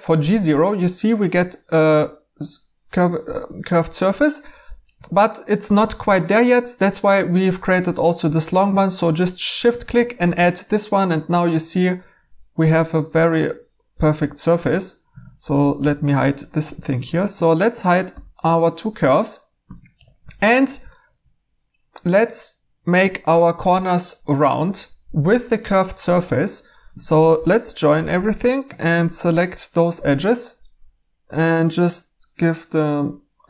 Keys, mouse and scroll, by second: 15.1 Tab, 15.8 h, 16.6 2, 18.0 typing, 19.1 typing, 19.6 Tab, 20.2 typing, 21.6 typing, 27.6 j, 28.1 j.